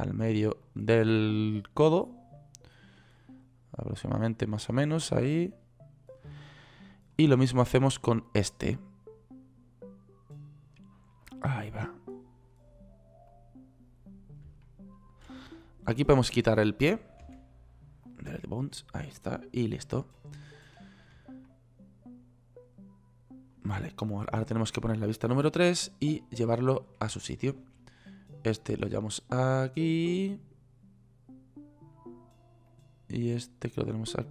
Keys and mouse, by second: 17.7 Delete, 25.9 KP_3.